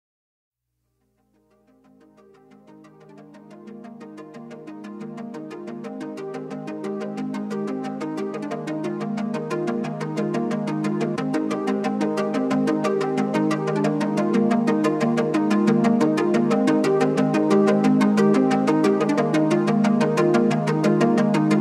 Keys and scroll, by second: 17.7 z.